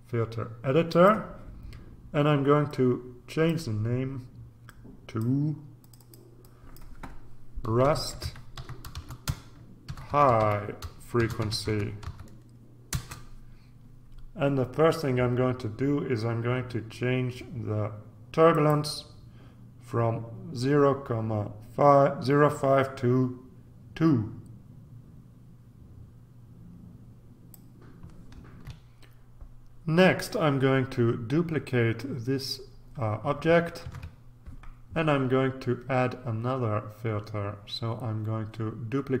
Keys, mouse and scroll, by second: 0.9 click, 2.6 click, 4.6-7.3 drag, 7.6-12.5 typing, 12.9 Return, 18.5 click, 22.5-28.1 drag, 28.6 ctrl+r, 33.8 ctrl+d.